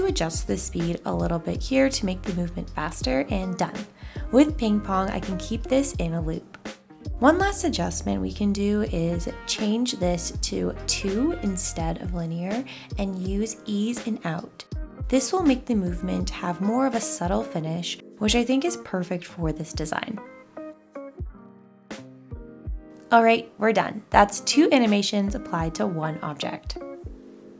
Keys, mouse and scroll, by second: 1.2 1, 12.8 2.